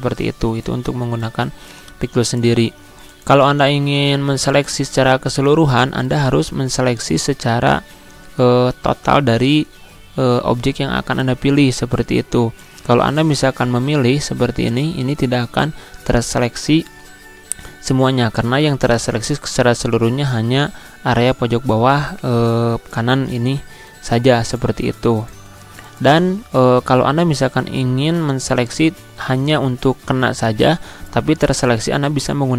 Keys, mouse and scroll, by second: 5.8-16.7 drag, 18.6-24.9 drag.